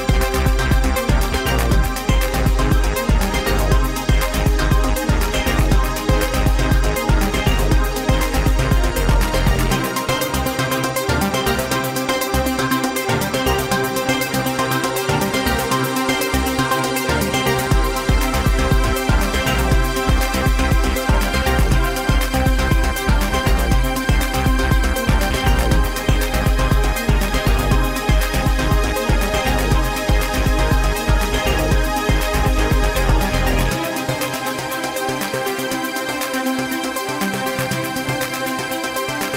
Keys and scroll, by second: 1.6 KP_1, 5.7 KP_1, 6.7 Tab, 10.8 z, 17.3 Tab, 20.6 ctrl+a, 22.1 ctrl+a, 22.5 ctrl+a, 24.2 alt+z, 32.2 Escape, 33.2 ctrl+b.